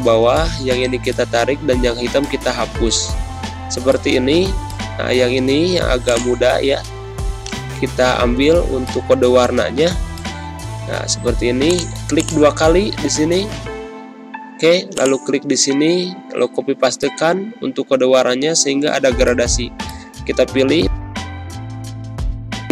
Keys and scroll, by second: 10.5 ctrl+z, 16.2 ctrl+v.